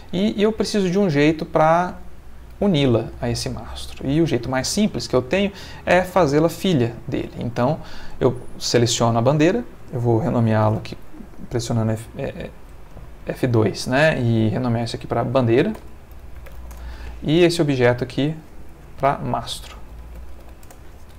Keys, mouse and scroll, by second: 0.8 ctrl+middle click, 1.3 ctrl+shift+middle click, 2.4 click, 3.2 shift+middle click, 3.9 ctrl+shift+middle click, 8.7 click, 10.3 F2, 12.9 Escape, 13.4 F2, 14.9-16.6 typing, 16.7 shift+Return, 17.9 click, 18.7 F2, 19.7-20.4 typing, 20.6 shift+Return.